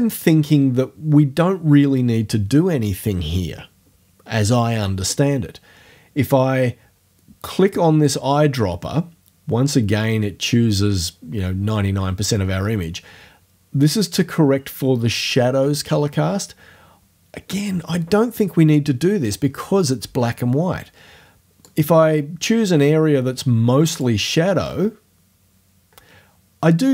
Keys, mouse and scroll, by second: 8.1 click, 21.7-24.2 drag.